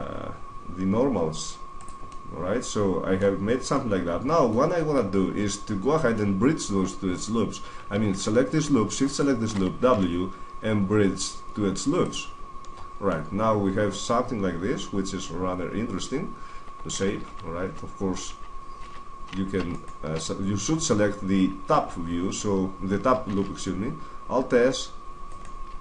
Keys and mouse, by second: 1.7 click, 2.3-3.5 middle drag, 3.7-5.1 middle drag, 6.3-7.6 middle drag, 7.9-10.7 right drag, 9.7 w, 12.5-14.1 middle drag, 14.3 middle click, 14.7-16.1 middle drag, 17.1 ctrl+z, 17.5 ctrl+z, 18.1 ctrl+z, 18.7 ctrl+z, 23.1 alt+s, 25.1 right click.